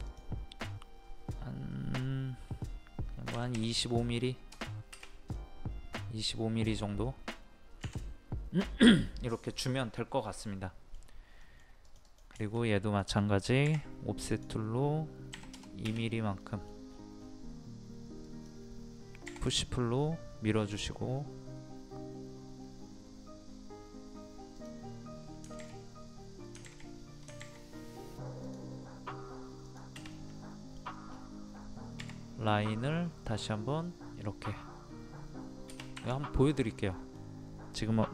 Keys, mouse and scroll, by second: 0.0 click, 3.3 KP_2, 5.3-7.0 middle drag, 7.0-7.4 scroll up 1, 7.8 Escape, 10.6 middle click, 11.8 click, 12.4 shift+middle click, 14.3 click, 15.3 KP_2, 16.4 middle click, 17.2 scroll up 1, 18.2 click, 19.2 p, 19.4 click, 28.4 click, 30.1 middle click, 30.7-31.1 scroll down 1, 33.2 click, 35.9 Escape, 36.5 click, 36.7 middle click.